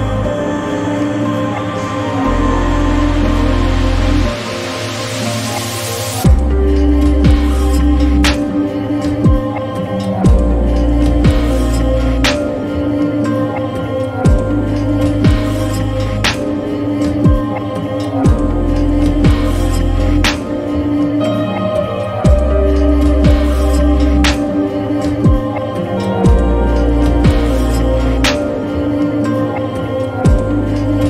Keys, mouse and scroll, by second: 1.8 click, 3.4 ctrl+a, 4.7-5.9 typing, 6.4 Return, 8.6-16.1 drag, 13.5-14.4 shift+drag, 17.1 ctrl+a, 18.3-19.3 typing, 19.8 Return, 21.9-26.2 drag.